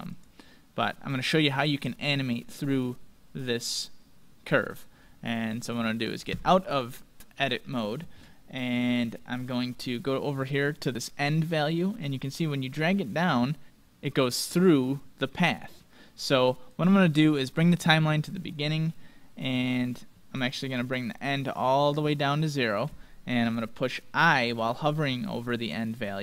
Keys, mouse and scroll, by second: 0.8 middle click, 1.2-1.7 scroll up 1, 1.7-3.5 middle drag, 6.3 Tab, 17.7-19.4 drag, 20.5-22.1 drag.